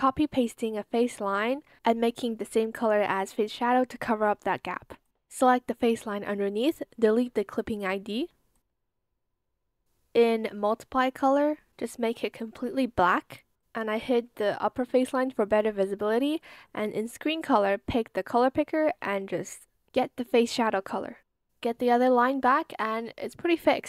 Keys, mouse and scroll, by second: 1.4 ctrl+c, 2.3 ctrl+v, 7.2 BackSpace, 7.4 Return.